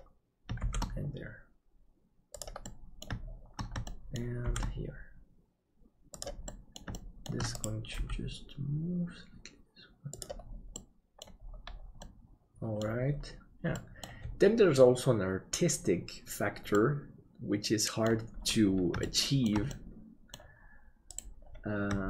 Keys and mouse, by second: 2.7 middle click, 3.8 shift+middle click, 4.5 shift+d, 6.6 middle click, 7.0 shift+middle click, 8.0 g, 10.8 middle click, 12.1 middle click, 13.7 middle click, 16.8-18.1 middle drag, 19.1 shift+middle click, 19.8 middle click.